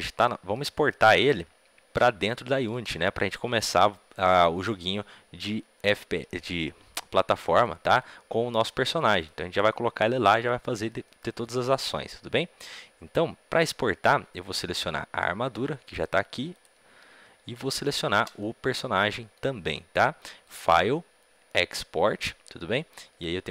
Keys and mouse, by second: 15.5 middle click, 16.5-17.5 drag, 18.3-23.5 right drag.